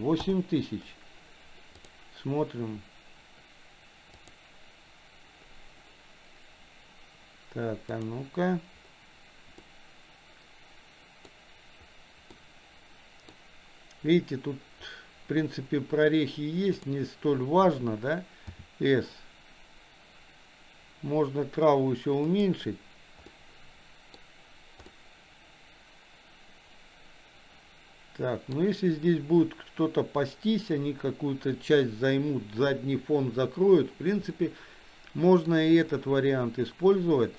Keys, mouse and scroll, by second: 2.0 click, 8.1 click, 9.9-12.0 middle drag, 12.6-13.7 middle drag, 18.5 s, 23.4 middle click, 25.1-29.0 middle drag, 34.7-36.0 middle drag.